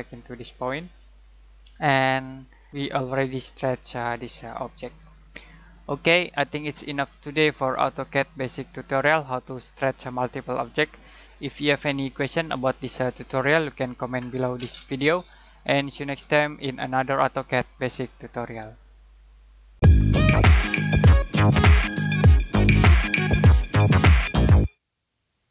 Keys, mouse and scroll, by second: 2.1 middle click.